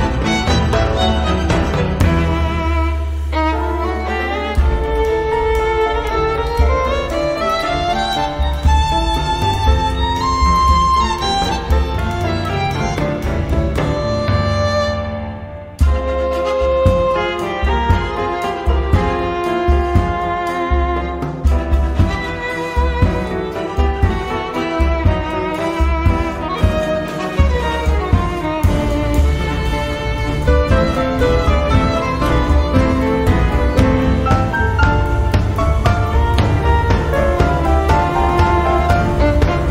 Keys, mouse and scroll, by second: 0.3 0, 0.8-1.4 scroll down 2, 2.2 scroll up 2, 2.6 scroll down 2, 4.8 click, 5.8 click, 6.8 click, 7.9 click, 9.2 click, 9.8 click, 10.9 click, 13.4 click, 14.4 click, 15.6 click, 17.2 click, 19.4 click, 20.2 click, 21.4 click, 22.7 click, 23.3-24.8 drag, 26.0 click, 27.3-29.9 drag, 30.3 click, 30.8 space, 31.7 click, 32.0 space, 32.4 click, 32.8 space, 33.9 click, 34.3 space, 34.8 click, 35.2 space, 37.7 click.